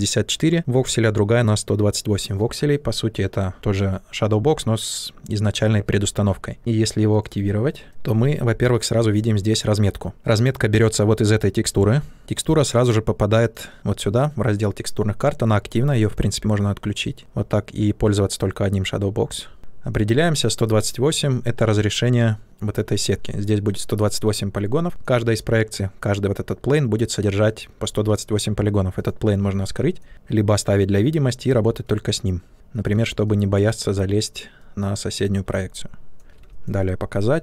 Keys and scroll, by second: 32.5 shift+f.